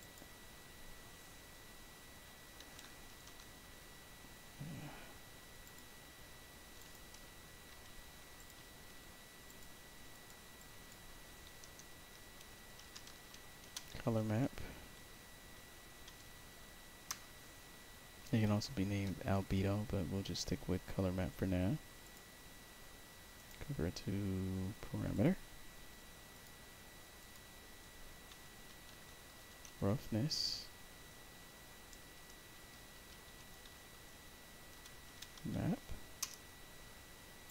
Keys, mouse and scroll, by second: 2.3-3.8 typing, 5.5 click, 6.7 click, 8.3 click, 9.4 click, 10.0 click, 10.5 click, 11.8-14.1 typing, 15.7-16.6 typing, 17.0 Return, 18.9 alt+middle click, 19.4 middle click, 20.1 middle click, 21.9 click, 23.3 right click, 25.0 click, 26.3 click, 27.1 click, 28.6-35.1 typing, 36.1 Return, 37.4 click.